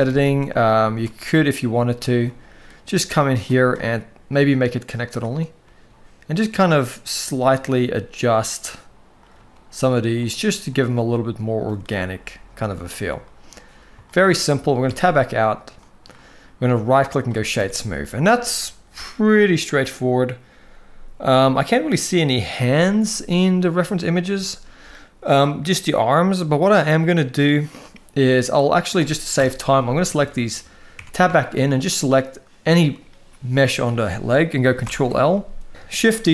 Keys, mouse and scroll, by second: 2.7 g, 4.2-5.0 drag, 5.4 g, 9.1 g, 10.7 g, 13.1-13.5 middle drag, 13.8 shift+middle drag, 14.4 middle click, 14.6 Tab, 15.5 middle drag, 16.6-17.0 right drag, 17.4 alt+a, 18.0 shift+middle drag, 22.9-24.0 middle drag, 24.2 shift+middle drag, 29.0 KP_1, 30.0 shift+middle click, 30.7 Tab, 31.1 shift+middle click, 31.7 click, 34.6 ctrl+l, 35.8 shift+d.